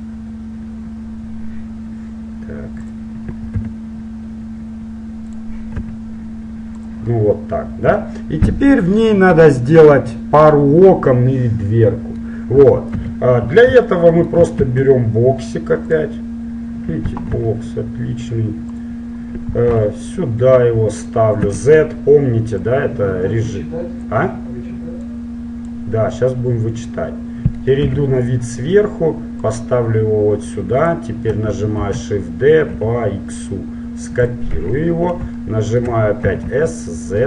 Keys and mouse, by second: 3.7 g, 6.0 s, 9.1-10.5 middle drag, 13.0 KP_1, 14.7 shift+a, 17.5 s, 19.9 g, 21.7 z, 22.8-24.7 drag, 25.3-27.2 drag, 28.0 KP_7, 29.6-31.2 drag, 32.0 shift+d, 34.7 KP_1, 36.5 s.